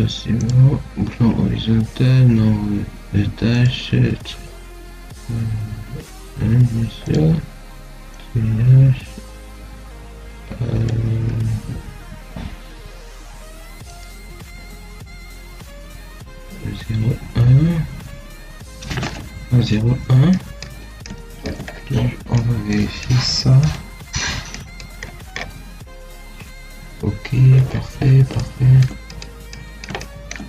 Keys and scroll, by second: 11.0 1, 13.0 BackSpace.